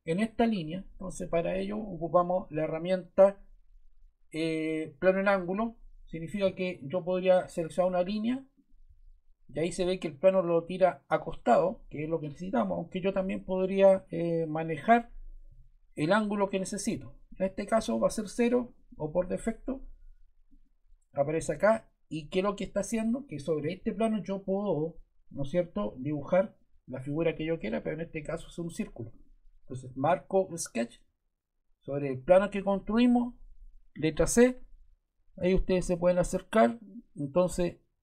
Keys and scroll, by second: 15.5 o, 33.9 c.